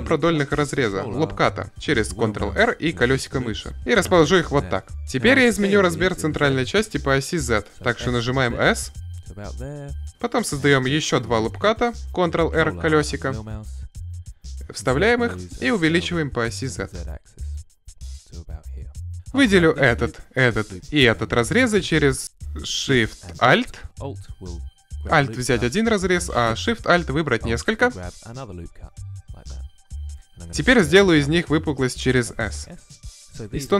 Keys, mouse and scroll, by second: 3.8-5.2 middle drag, 5.4 s, 8.9-10.1 drag, 10.1 ctrl+r, 13.3-15.4 drag, 14.5 s, 19.1-22.2 right drag, 23.4-25.6 right drag, 26.6-30.2 right drag, 30.2 s.